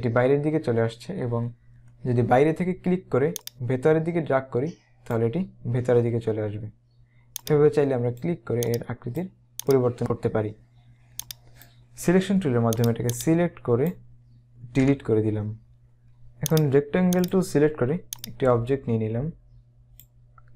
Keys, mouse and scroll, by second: 3.5 click, 7.5 click, 11.3 click, 12.9 click, 14.8 Delete, 16.6 right click, 17.1 click.